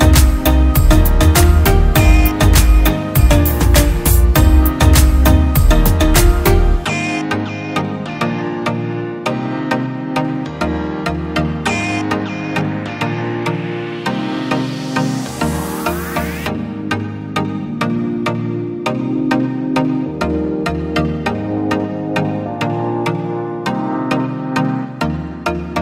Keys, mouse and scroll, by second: 5.3-6.3 scroll up 1, 20.6 double click.